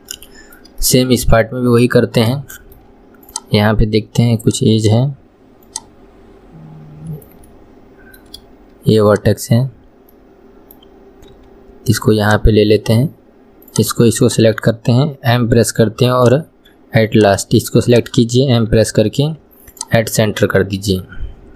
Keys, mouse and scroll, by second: 2.1 scroll up 2, 2.5-3.4 shift+middle drag, 3.4 click, 4.6 click, 4.9 click, 5.9 click, 7.7-9.2 middle drag, 9.2 click, 9.6 scroll down 2, 10.3-11.5 middle drag, 11.5 g, 12.7-13.8 scroll up 1, 13.8 click, 14.3 shift+click, 17.3 click, 18.1 shift+click, 20.5 scroll down 1, 20.9-21.5 middle drag.